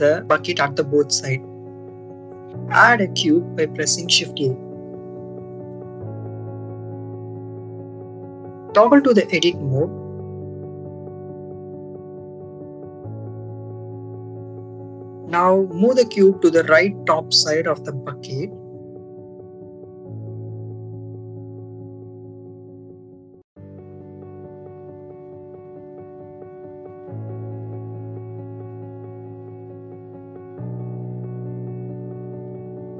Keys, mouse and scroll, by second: 0.3-2.1 drag, 2.7 shift+a, 8.5 click, 9.5 Tab, 9.8 click, 11.6 click, 13.6 click, 14.6 ctrl+z, 15.4-16.7 drag, 17.8-19.0 drag, 19.7 click, 20.6 ctrl+z, 21.2 click, 23.1 s, 24.1 z, 25.7 click, 26.2 s, 26.7 y, 31.0 click, 31.8 click, 32.8-32.9 drag.